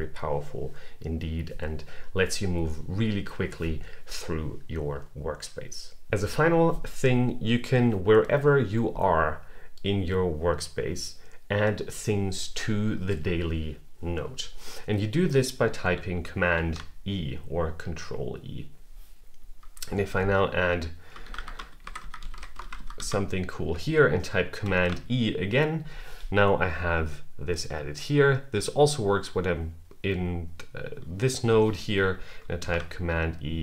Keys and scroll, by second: 16.4 super+e, 24.5 super+e, 32.4 super+e.